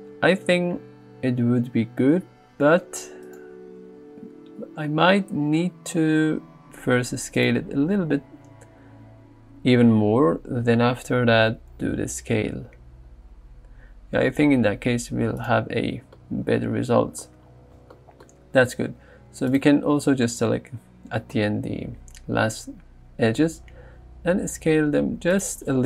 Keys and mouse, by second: 5.7 s, 7.4 click, 10.6 ctrl+b, 23.2 s, 25.4 click.